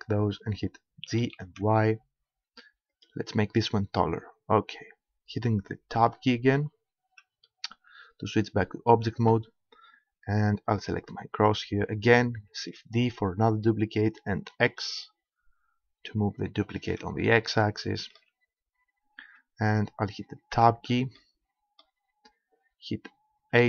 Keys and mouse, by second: 1.1 g, 3.1-4.6 drag, 4.6-6.1 middle drag, 6.1 Tab, 10.7-12.7 right drag, 12.9 shift+d, 16.7-18.5 drag, 18.5-20.5 middle drag, 20.5 Tab, 23.5 a.